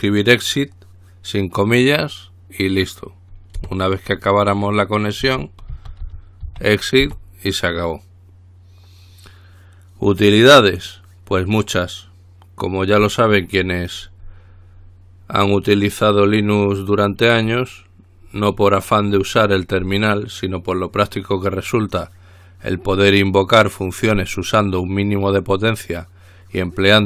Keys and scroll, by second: 4.0 Return, 5.2-7.8 typing.